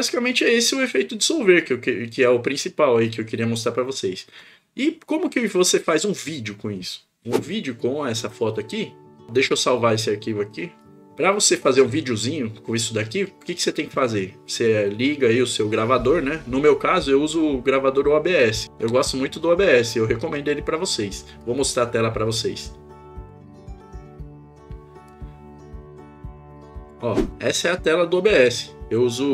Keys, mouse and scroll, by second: 21.4-23.4 drag, 25.2-27.1 drag.